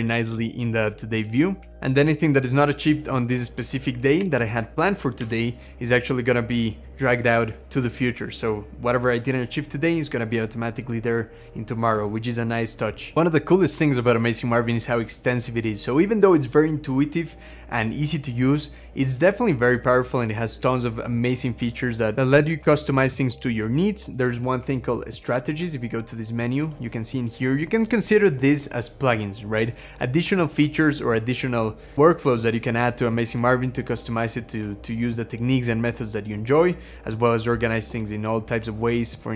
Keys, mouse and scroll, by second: 1.6 x, 4.1 z, 5.0 z, 28.0 scroll down 1, 29.2-30.0 scroll down 2, 30.0-31.0 scroll down 3, 31.0 scroll down 3, 32.0-33.0 scroll down 3, 33.0-34.9 scroll down 9, 35.1-35.6 scroll down 7, 36.2-37.0 scroll down 7.